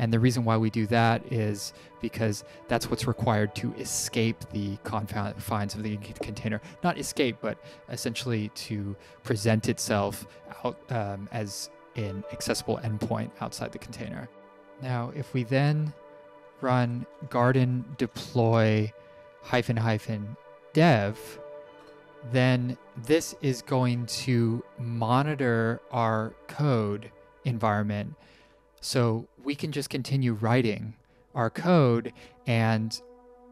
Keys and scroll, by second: 14.3 Print, 15.4 ctrl+`, 16.1-20.5 typing.